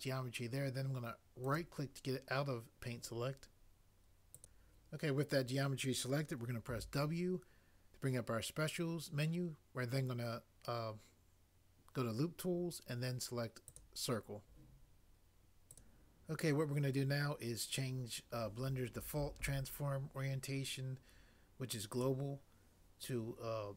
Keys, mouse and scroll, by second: 6.7 w.